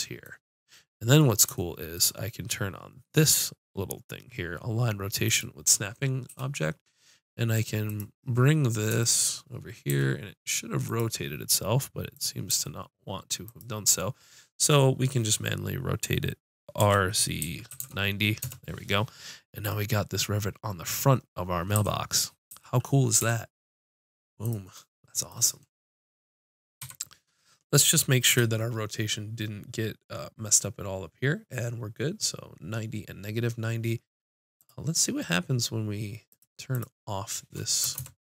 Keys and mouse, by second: 5.3-6.9 drag, 6.3 g, 8.2-10.1 drag, 10.1 g, 11.0-12.5 drag, 12.5 g, 12.6-15.2 drag, 16.8 r, 21.8 t, 22.5 t, 23.2 g, 24.8-26.1 drag, 26.8 KP_Decimal, 28.3 n, 34.6-36.5 drag, 36.7-38.2 drag.